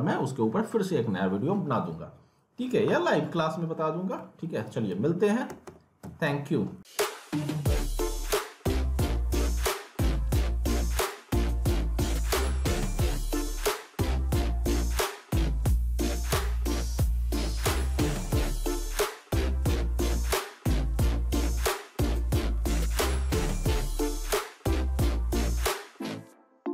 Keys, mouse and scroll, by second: 3.1 alt+Num_Lock, 3.4 alt+middle click, 4.1 scroll down 1, 4.2 alt+middle click, 4.7 click, 5.2-6.5 typing, 6.2 alt+middle click, 6.7 scroll down 1.